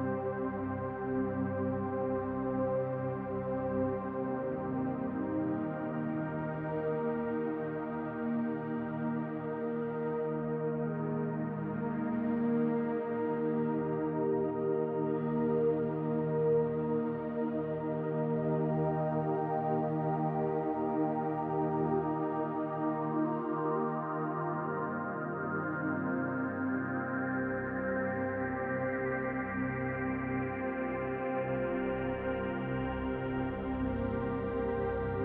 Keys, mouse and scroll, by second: 3.3 click, 4.2 click, 7.2 middle click, 8.3-9.0 scroll down 3, 8.6 middle click, 9.7-10.3 scroll up 1, 10.4 middle click, 10.8-11.4 scroll up 1, 11.4 scroll up 1, 12.6 right click, 15.5 click, 17.7 click, 22.6 shift+click, 28.5 click, 29.4 click, 30.9 click, 35.1 middle click.